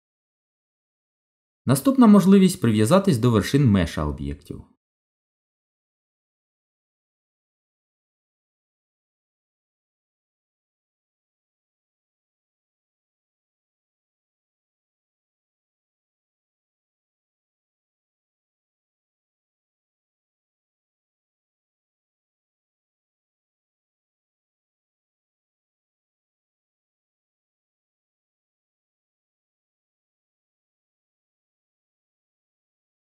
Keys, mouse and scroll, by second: 2.1 click, 9.0 middle click, 12.5 click, 15.9 g, 29.0 ctrl+z, 29.7 middle click, 32.7 Tab.